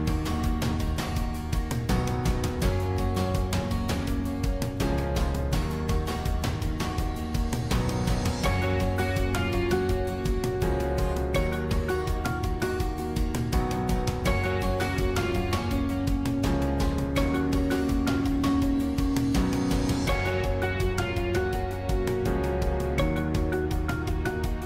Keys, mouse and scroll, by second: 6.3 click, 7.2 scroll, 8.9-20.7 drag, 20.9-24.6 drag.